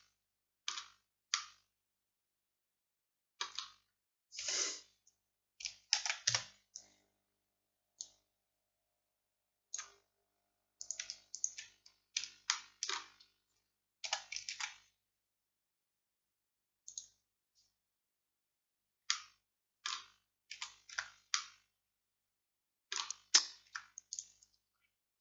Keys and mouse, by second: 4.5 KP_1, 6.0 shift+d, 8.1-16.9 drag, 14.1 s, 19.1-20.6 drag, 20.6 z, 21.0 Tab, 23.7 Tab.